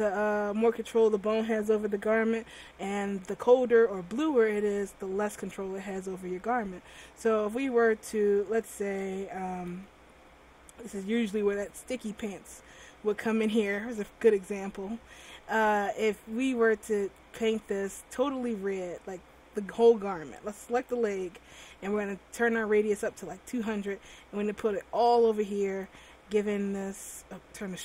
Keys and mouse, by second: 9.1 t, 9.2 right click, 9.9 r, 16.8-18.5 drag, 22.2 middle click, 22.8-24.3 drag, 27.4-27.8 drag.